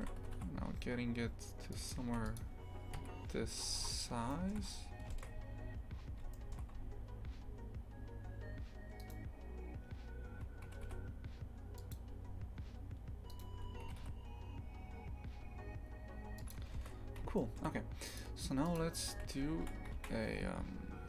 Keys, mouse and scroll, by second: 0.2 g, 2.1 shift+f, 3.0 KP_3, 3.6-3.9 scroll down 10, 4.3 shift+middle click, 4.6 scroll up 1, 5.9 scroll up 2, 6.3 shift+middle click, 6.7 scroll up 2, 9.0 right click, 10.7 g, 13.3 right click, 13.9 g, 17.4-18.2 shift+middle drag, 18.2 click, 18.8 click, 19.1 a.